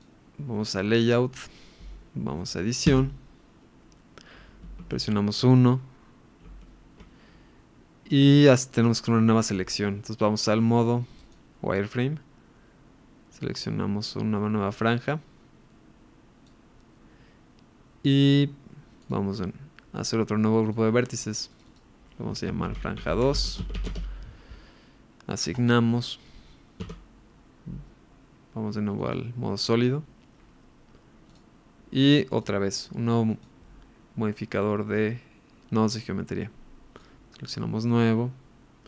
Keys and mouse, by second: 0.6-1.3 middle drag, 3.2 Tab, 4.7 KP_1, 6.4 ctrl+KP_1, 11.2 click, 13.5 click, 13.8-16.5 drag, 20.8-23.9 drag, 25.6 click, 26.9 Tab, 29.0 click, 32.3-33.4 drag.